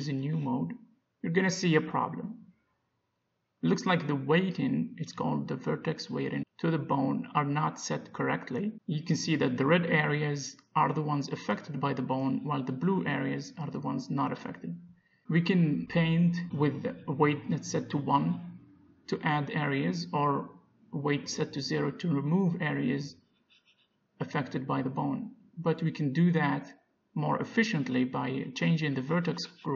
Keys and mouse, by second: 0.1 g, 1.1 click, 5.1-6.6 drag, 7.6 click, 8.6-10.5 middle drag, 10.7-12.3 middle drag, 17.1-19.8 drag, 21.4 ctrl+z, 22.6-25.8 drag, 27.7-29.5 right drag, 28.3 ctrl+z.